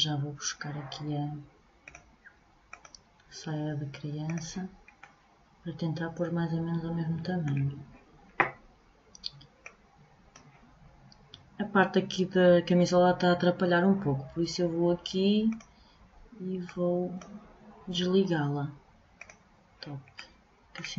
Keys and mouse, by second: 1.4-4.6 drag, 9.2-11.1 drag, 15.1-18.2 middle drag, 18.7-20.6 middle drag.